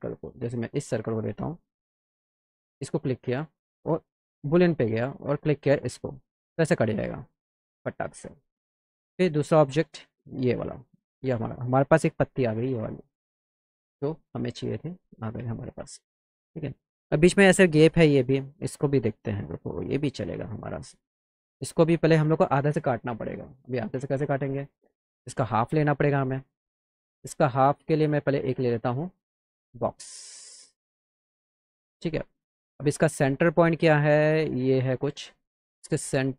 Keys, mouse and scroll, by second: 2.7 click, 4.5 click, 5.8 click, 10.5 click, 13.1 click, 14.7 click, 15.2 click, 16.0 middle click, 16.4 middle drag, 20.7-21.1 middle drag, 23.5 click, 24.5 click, 26.8-28.5 drag, 28.7 right click, 29.2-29.6 scroll up 1, 31.8 click, 33.1 click, 33.6 middle click, 35.3 middle drag, 36.2 click.